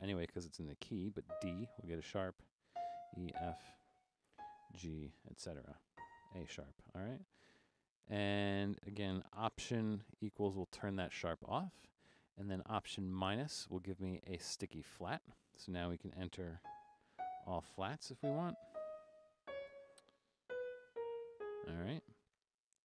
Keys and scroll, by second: 1.4 d, 2.5-3.3 typing, 4.3 typing, 5.9 a, 7.5-9.1 typing, 10.5 alt+=, 13.3 alt+-, 16.7-17.2 typing, 18.3-21.9 typing.